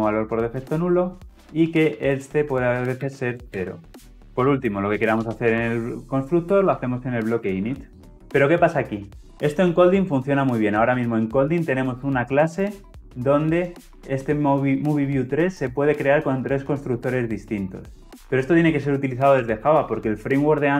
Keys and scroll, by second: 6.4 Return.